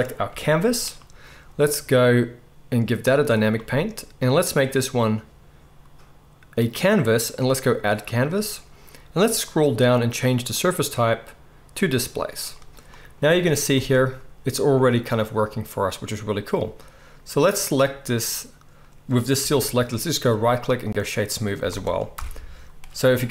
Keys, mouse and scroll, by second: 0.2 g, 3.2-17.5 drag, 13.7 space, 17.5-20.3 middle drag, 19.4 g, 20.3-23.3 right drag, 21.6 space, 22.1 shift+Left, 23.1 space.